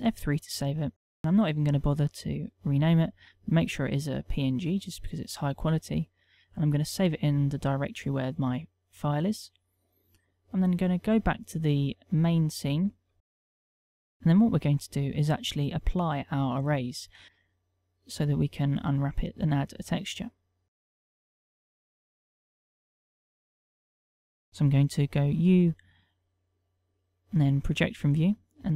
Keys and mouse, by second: 10.3 click, 12.4 click, 13.5 click, 17.2 click, 19.1 click, 20.4 click, 21.4 click, 24.0 Tab, 25.8 u.